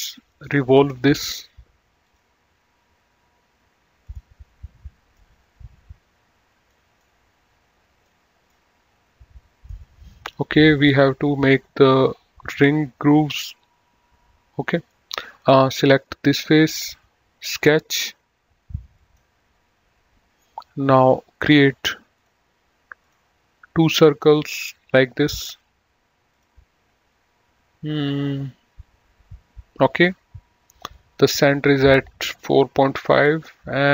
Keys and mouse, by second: 0.5 click, 2.3 click, 4.3 click, 7.3 middle click, 8.8 middle click, 11.2 middle click, 14.9 middle click, 17.7 click, 19.2 click, 21.0 click, 22.4 click, 24.4 click.